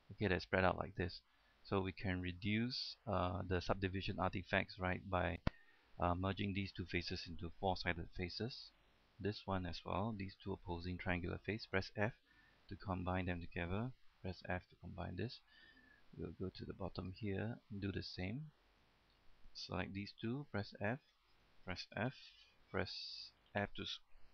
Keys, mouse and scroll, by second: 4.9 scroll down 1, 5.2 middle click, 6.3 right click, 6.8 shift+right click, 8.4 f, 9.1 right click, 10.5 shift+right click, 12.0 f, 12.7 right click, 13.2 shift+right click, 14.3 f, 14.7-15.0 scroll down 1, 15.0 middle click, 16.7-17.0 scroll up 1, 17.0 middle click, 18.3 right click, 18.9 shift+right click, 20.5 f, 21.0 right click, 21.5 shift+right click, 22.3 f, 23.0 right click, 23.6 shift+right click.